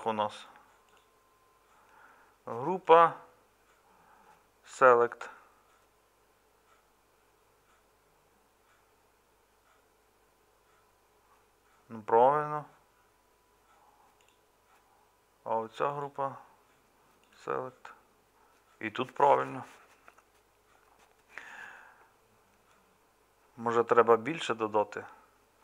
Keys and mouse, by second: 0.0-25.6 middle drag.